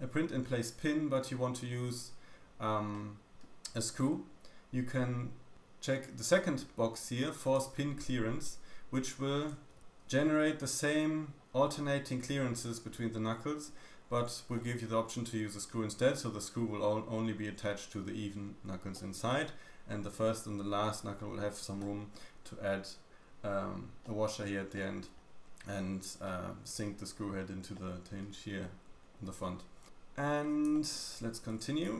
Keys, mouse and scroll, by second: 0.2-8.1 middle drag, 2.3-2.8 scroll down 1, 2.8-4.5 scroll down 1, 8.1-9.7 drag, 9.7-24.0 middle drag, 9.7 z, 9.8 scroll down 1, 10.7-11.7 scroll up 2, 14.0 scroll down 1, 21.5 scroll up 1, 23.4-24.0 scroll down 3, 24.7 middle click, 25.1 scroll up 2, 26.2 middle click, 27.7 middle click, 27.7-28.3 scroll down 1, 30.2-30.6 scroll up 1, 30.6-31.0 shift+middle drag, 31.6 d, 31.8 right click.